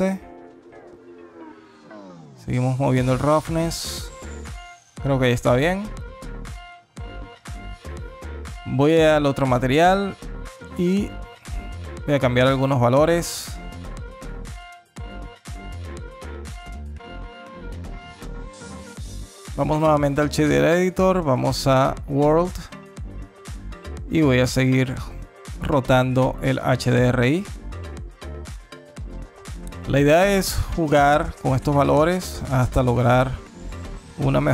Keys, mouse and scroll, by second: 2.0 click, 7.0 click, 8.3 click, 9.5 click, 10.2 click, 13.3 click, 16.0 n, 16.4 click, 16.8 n, 16.9 alt+click, 17.5 alt+middle click, 17.7 alt+click, 18.5 click, 20.1 click, 22.1 middle click, 23.0 click, 32.8 click, 34.1 click.